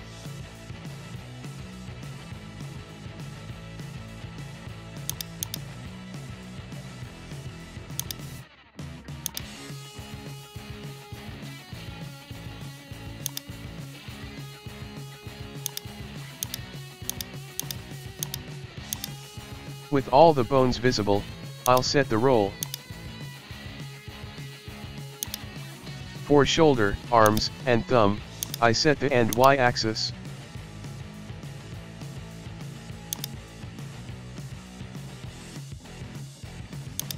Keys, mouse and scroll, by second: 0.2 scroll down 1, 0.3-0.8 scroll up 2, 0.8-1.2 scroll down 1, 1.2-2.6 shift+middle drag, 2.6 KP_1, 2.9-4.5 shift+middle drag, 5.1 click, 5.4 click, 5.7-6.8 scroll up 2, 6.0 shift+middle click, 6.8 shift+middle click, 7.1 Tab, 8.0 click, 9.3-10.8 shift+drag, 12.3 Tab, 12.6 scroll down 1, 12.8 shift+middle click, 12.9-13.3 scroll up 1, 13.3 click, 15.7 shift+click, 16.4 shift+click, 16.8 shift+middle click, 17.1 shift+click, 17.9 shift+middle click, 18.2 shift+click, 18.6 shift+middle click, 18.9 shift+click, 19.3 shift+scroll, 19.3-20.0 scroll up 3, 19.6 shift+middle click, 20.0 middle click, 21.7 shift+click, 22.6 shift+click, 23.1-23.4 shift+middle drag, 23.4-23.8 scroll down 1, 23.8 shift+middle click, 24.5 g, 25.5-26.6 shift+middle drag, 26.6 KP_1, 26.8 shift+middle click, 27.0 scroll up 1, 27.3 shift+click, 28.1 g, 29.3-30.9 drag, 33.6-34.3 scroll, 33.8 shift+middle click, 34.3 shift+middle click, 35.0-35.6 scroll, 35.2 shift+middle click, 35.6 middle click, 36.2 scroll, 36.5 middle click, 37.0 click.